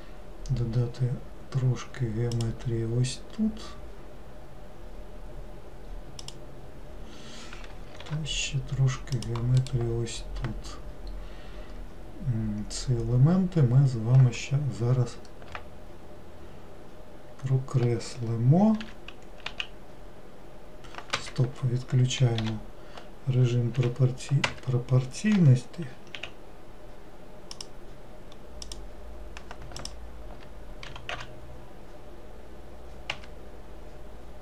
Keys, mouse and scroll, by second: 28.8 click, 29.9 alt+click, 31.0 g.